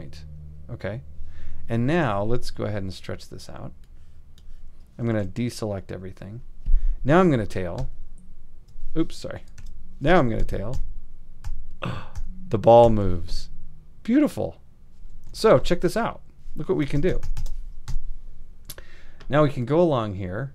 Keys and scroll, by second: 5.1 shift+super+a, 7.8 alt+], 9.6 alt+super+2, 10.4 alt+super+2, 16.9 super+=, 17.9 super+Home.